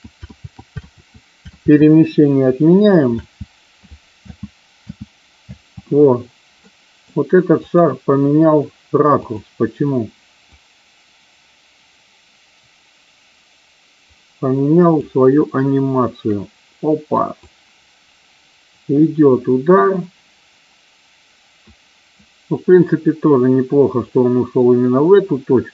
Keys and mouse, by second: 0.3 ctrl+z, 0.8 ctrl+z, 1.5 ctrl+z, 3.0 space, 4.1 space, 4.8 space, 5.4 space, 6.5-7.0 middle drag, 7.5 click, 9.3 click, 10.5-15.0 drag, 17.4-25.7 drag.